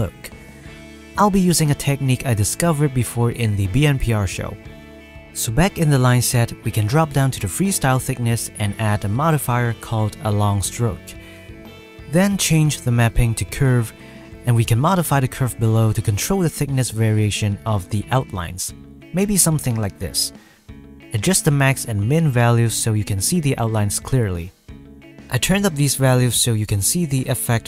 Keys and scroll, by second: 20.3 F12, 24.0 F12.